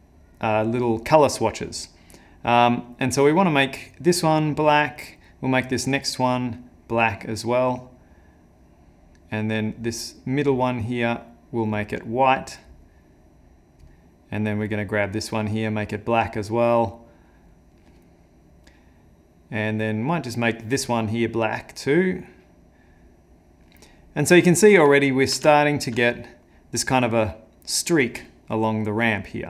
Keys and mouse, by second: 2.9 click, 4.8 click, 5.9 click, 9.8 click, 10.8 click, 14.6 click, 15.4 click, 20.1 click, 20.7 click, 24.3 middle click, 25.0 ctrl+middle click, 25.5 shift+middle click, 26.0 middle click.